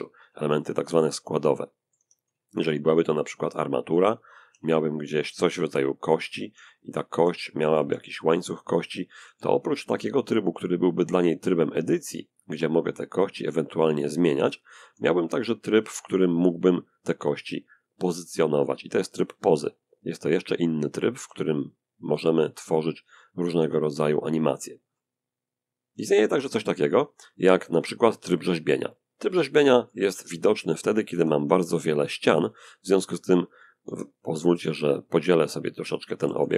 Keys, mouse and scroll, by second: 0.0-1.6 drag, 0.4-1.6 middle drag, 1.3 Tab, 1.7 shift+a, 2.8 click, 3.7 g, 4.5 click, 4.9 Tab, 5.4 click, 5.8 e, 6.3 click, 6.5 e, 6.8 middle click, 6.9 click, 7.0 e, 7.5 click, 8.2 click, 8.9 click, 9.2 Tab, 10.9 click, 11.6 click, 12.4 click, 12.6 g, 13.2 click, 13.4 s, 14.2 s, 14.6 click, 15.1 g, 15.8 click, 16.9 click, 18.9 click, 20.2 click, 20.5 r, 20.8 click, 21.3-22.2 drag, 21.4 r, 22.3 click, 22.8 s, 24.0 click, 24.8 click, 24.8 r, 25.0 click, 25.4 r, 25.8 Tab, 26.7 click, 27.3 click, 28.0-29.5 middle drag, 29.4 Tab, 30.4 a, 30.6 a, 30.9 w, 31.8 click, 33.1 a, 33.5 right click, 35.1 shift+click, 35.4 shift+r, 35.6 shift+r, 35.9 shift+r.